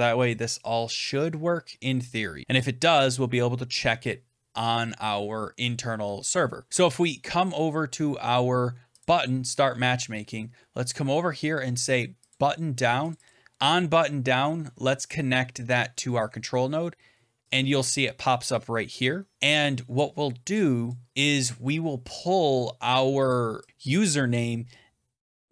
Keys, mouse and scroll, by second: 6.7-8.9 scroll down 7, 9.0 click, 12.2 click, 13.0 click, 13.2 click, 17.4 click, 20.8 click, 23.2 click, 23.6 click.